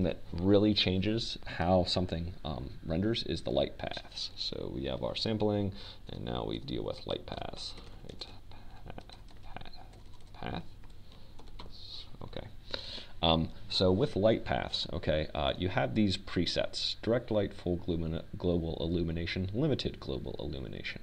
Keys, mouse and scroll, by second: 2.4-4.5 drag, 6.7 click, 8.1 Tab, 9.8 Return, 10.5-14.8 typing, 15.6 Tab, 18.9-20.6 drag.